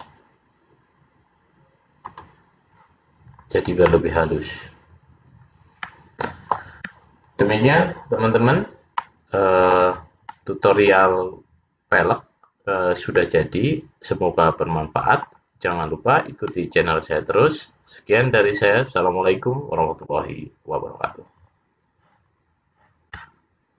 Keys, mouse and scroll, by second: 0.0 click, 2.2 click, 3.4 scroll down 3, 4.0 middle click, 7.8 scroll down 2, 9.1 middle click, 10.5 middle click, 12.1-12.8 scroll up 2, 12.8-13.4 scroll up 1, 13.4 middle click, 16.6 middle click.